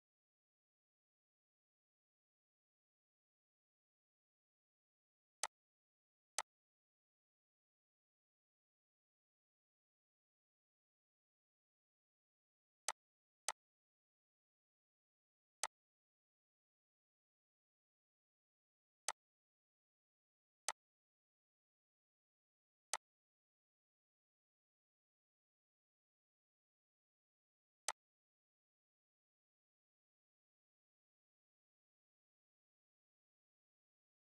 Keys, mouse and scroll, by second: 5.4 click, 12.8 click, 14.1 scroll up 1, 14.8 scroll, 15.6 click, 15.9 scroll up 2, 17.5 scroll, 19.1 click, 19.9 right click, 20.6 click, 22.9-34.3 drag.